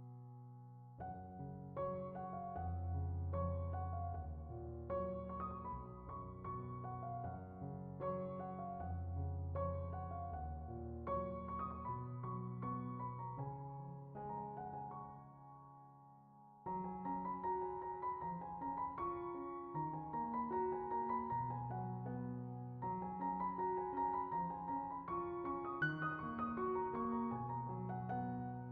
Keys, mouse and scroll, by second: 1.3 click, 2.0 middle click, 2.9 middle click, 3.2 ctrl+shift+click, 4.3 drag, 5.2 drag, 6.2 click, 6.5 z, 6.6 scroll up 3, 6.7 middle click, 6.9 drag, 7.8 drag, 8.8 click, 9.7 drag, 11.0 drag, 11.8 click, 12.5 x, 13.1 click, 14.5 scroll down 5, 14.6 middle click, 15.5 right click, 15.7 middle drag, 16.0 click, 16.9 scroll, 17.7 right click, 19.3-19.8 drag, 20.9 click, 21.3 z, 21.3 scroll up 2, 21.5 click, 22.4 click, 24.1 click, 25.3-25.7 drag, 27.1 right click, 27.4 click, 27.7 scroll down 4, 27.8 middle click.